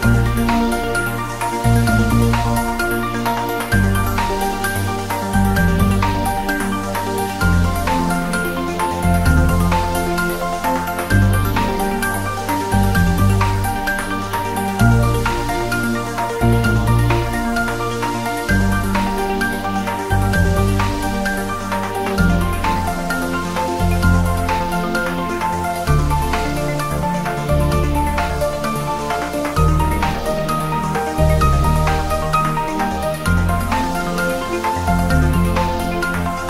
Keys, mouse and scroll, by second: 0.8-1.6 scroll up 2, 2.4-36.4 drag, 5.0 click, 5.8-7.1 drag, 8.3 Return, 9.3-11.9 drag, 12.3 Return, 13.0 click, 13.5 Return, 14.3-24.8 drag, 24.8 Right, 25.5 click, 26.9 Return, 27.6-36.4 drag.